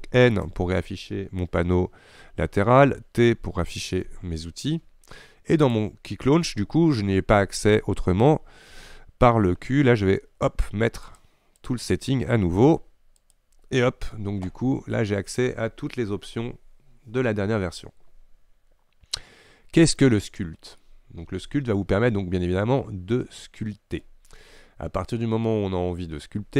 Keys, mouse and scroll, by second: 0.5 n, 4.1 t, 11.3 q, 18.6-19.0 scroll down 2, 19.0-19.6 scroll up 2, 20.9-24.0 middle drag.